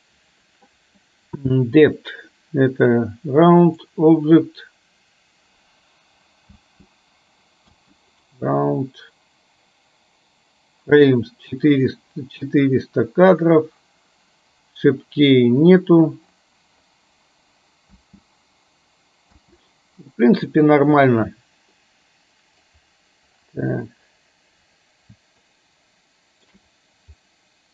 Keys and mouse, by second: 3.9 click, 6.6 space, 7.9 space, 8.4 click, 18.0 space, 19.7 space, 20.8 click, 21.9 middle click, 25.7-26.5 shift+middle drag, 27.3 middle click.